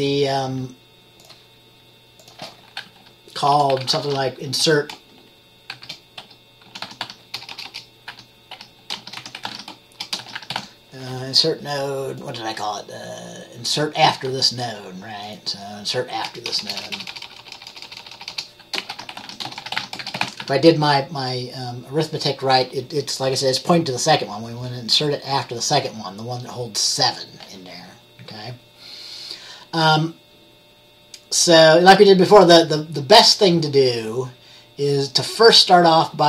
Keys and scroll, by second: 3.4-11.2 typing, 16.6-21.0 typing.